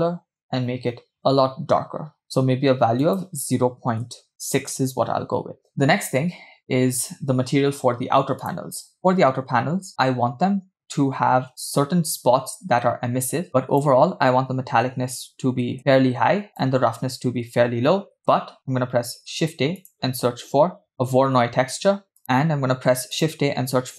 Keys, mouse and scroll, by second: 8.4 click, 9.0-9.8 scroll down 3, 13.6-15.8 drag, 16.5-18.2 drag, 19.0 shift+a, 22.2 scroll down 1, 22.8 shift+a.